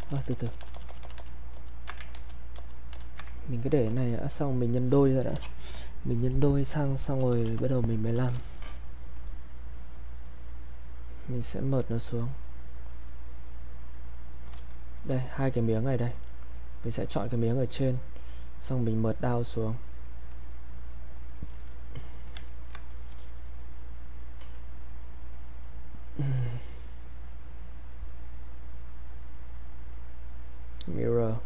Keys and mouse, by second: 2.1 ctrl+z, 3.4 ctrl+right click, 3.9 click, 7.3 click, 7.4 shift+f, 10.4 click, 22.1 alt+click, 22.5 ctrl+right click, 22.9 alt+click, 24.3 click, 27.0 click.